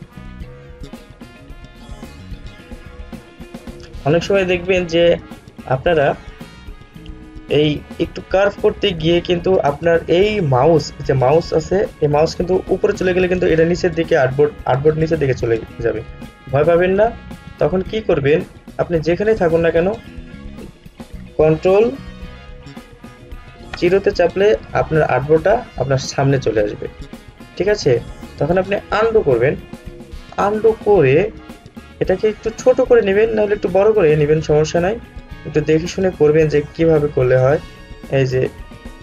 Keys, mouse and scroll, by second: 32.3 alt+scroll up 1, 37.4-39.0 drag.